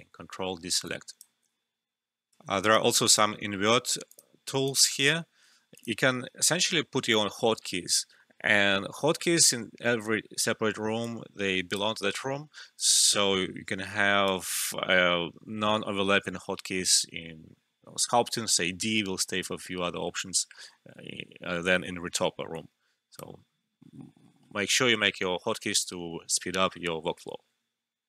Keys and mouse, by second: 2.2 alt+`, 2.7-4.1 drag, 11.0-12.7 drag, 12.7-18.1 right drag, 22.5-25.6 drag.